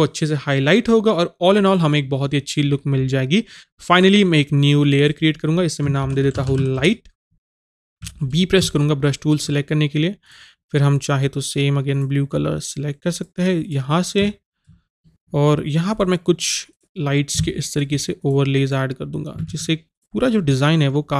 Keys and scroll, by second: 6.0 shift+l, 19.5 ctrl+a, 19.5 ctrl+z.